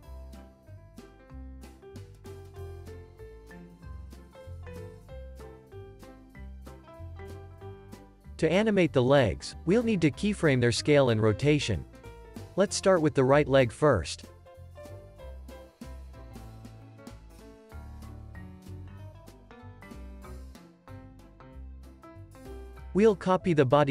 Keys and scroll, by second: 6.1 space, 8.3 super+s, 11.9 super+s, 16.8 super+s.